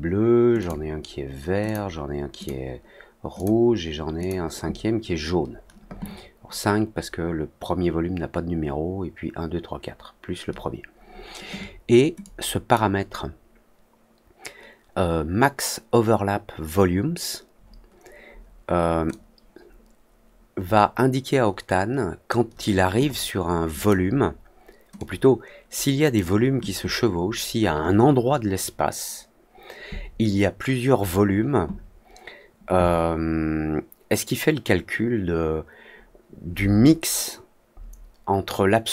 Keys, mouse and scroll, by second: 0.5 click, 1.6 click, 2.3 click, 3.3 click, 4.1 click, 12.1 click, 19.0-22.2 drag, 23.7 click, 24.9-26.1 drag.